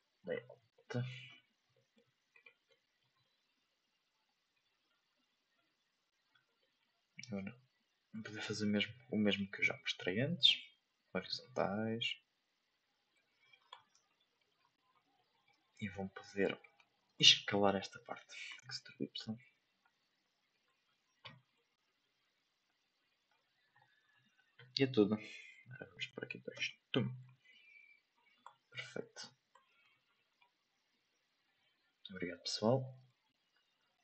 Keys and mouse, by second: 0.0 click, 0.8 shift+middle click, 1.2 a, 1.7 middle drag, 2.4-2.7 right drag, 2.7 middle drag, 4.5 click, 5.5 click, 6.6 middle click, 7.7-10.1 drag, 10.6-13.2 drag, 14.2 shift+middle click, 15.2 middle click, 16.1 Tab, 16.6 right click, 17.4 shift+middle click, 17.8 middle click, 18.5 e, 21.6 middle click, 22.9 click, 25.4-27.2 drag, 29.0 shift+middle click, 29.8 Tab, 30.2 middle click.